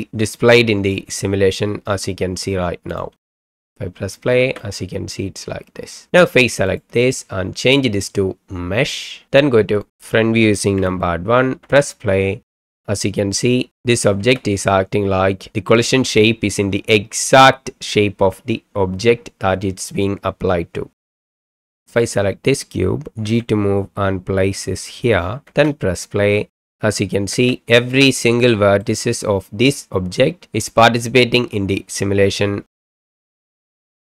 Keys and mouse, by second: 2.9 click, 3.2 space, 4.4 space, 7.7-9.0 drag, 9.8 click, 10.8 KP_1, 11.6 space, 14.2 space, 21.3 click, 21.5 click, 21.7 shift+right click, 22.0 click, 23.2 g, 25.5 space, 27.3 space, 28.4-28.9 middle drag, 33.1 space.